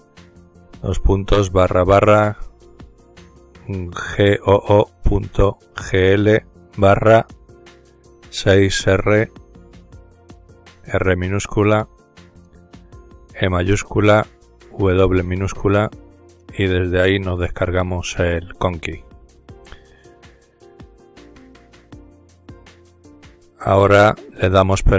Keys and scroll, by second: 0.0-0.5 typing, 1.9-4.2 typing, 5.8 typing, 7.8-8.6 typing, 10.6-12.2 typing, 13.4-14.0 typing, 16.0 Return, 16.5 typing, 19.5-21.2 typing, 21.4 Return, 23.2-24.9 typing.